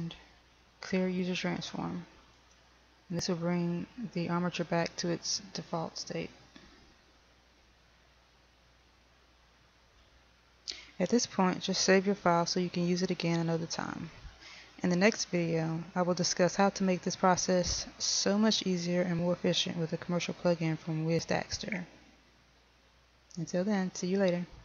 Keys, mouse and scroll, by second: 2.8 click, 10.5 a.